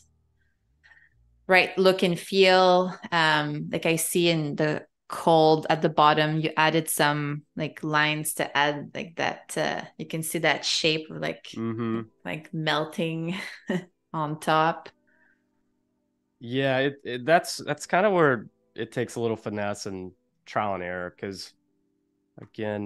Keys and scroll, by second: 0.0 3, 3.6 1, 5.8 6, 8.9 2, 11.1 Up, 12.2 Up, 12.9 Down, 14.9 Delete, 15.4 0, 17.7 Delete, 19.3 3.